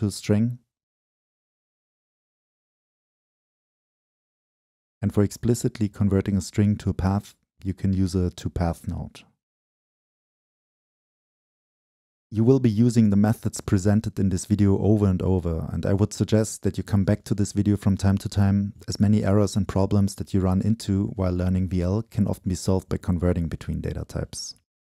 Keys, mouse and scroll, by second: 0.5-3.4 drag, 3.4 middle click, 3.8-5.5 drag, 6.0-8.6 drag, 8.6 Return, 10.4-11.6 drag, 11.6-12.3 middle drag, 12.3-13.5 drag, 13.5-14.6 middle drag, 14.6 click, 18.1-18.9 middle drag, 18.9-19.5 right drag, 19.5-20.1 scroll down 2, 20.1-20.8 middle drag, 20.8 scroll down 2, 21.1-21.4 scroll up 2, 21.4 middle click, 21.6 right click, 22.5 scroll up 2, 22.6-24.7 scroll down 2.